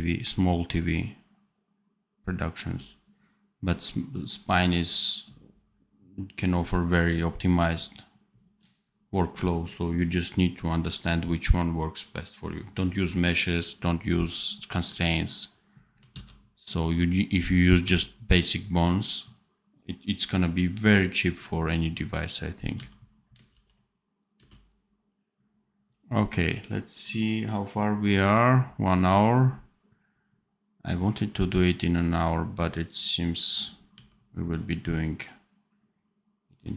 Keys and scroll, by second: 16.1 ctrl+s, 17.7 d, 22.7 d, 23.4 ctrl+b, 24.3 space, 33.8 d.